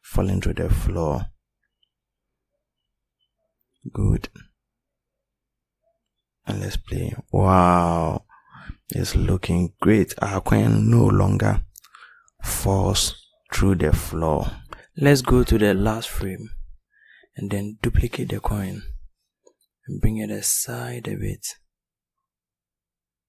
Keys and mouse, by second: 2.9 r, 16.6 shift+d, 18.5 click, 22.6 click.